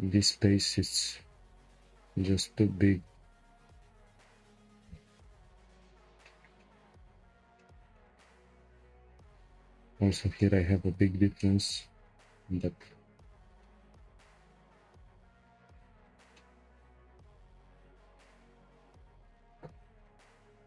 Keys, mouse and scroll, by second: 0.3 click, 1.2 g, 5.2 Tab, 5.6-6.2 scroll down 4, 6.2-9.5 shift+middle drag, 9.5 click, 10.4-10.8 shift+middle drag, 10.8-11.4 scroll up 6, 11.4-12.1 shift+middle drag, 12.1-12.6 scroll up 2, 12.6-13.1 shift+middle drag, 13.1-13.6 scroll down 3, 13.6-14.3 shift+middle drag, 14.3-15.4 scroll up 1, 15.4 click, 15.8 Tab, 16.3 shift+middle click, 16.7-17.2 scroll up 2, 17.2 click, 18.0 shift+click, 18.7 shift+click, 19.5 g.